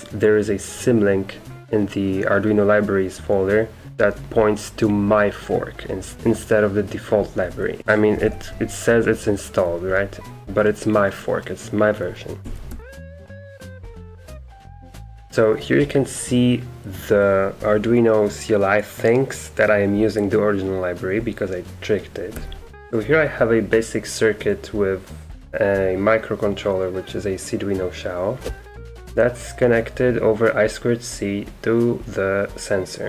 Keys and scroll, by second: 7.4 Escape, 7.8 typing, 8.1 Up, 8.3 Up, 12.5 Escape, 12.6-13.3 typing, 14.5-15.4 typing, 22.4 Escape, 22.7 Escape.